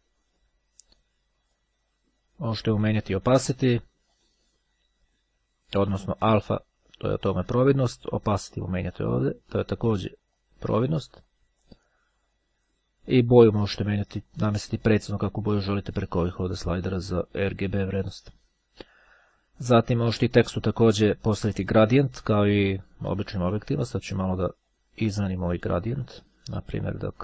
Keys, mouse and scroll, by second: 2.8 click, 6.1-8.5 drag, 9.1 click, 12.5 click, 13.5-15.3 drag, 15.5-17.3 drag, 20.1-22.3 drag, 23.3 click, 24.1-25.4 drag, 26.1 click, 26.7 click.